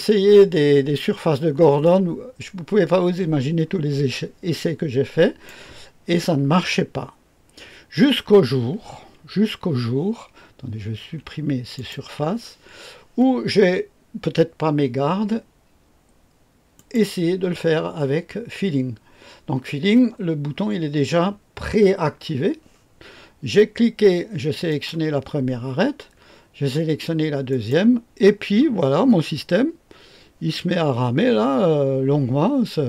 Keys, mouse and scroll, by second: 1.8-5.4 drag, 10.9 Delete, 11.7 click, 12.1 Delete, 16.7 click, 24.6 click, 27.4 click.